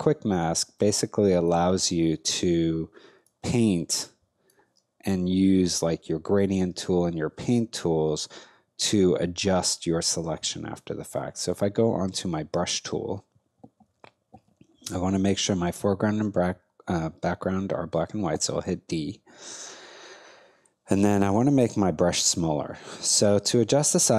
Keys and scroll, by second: 11.4 b, 18.3 d.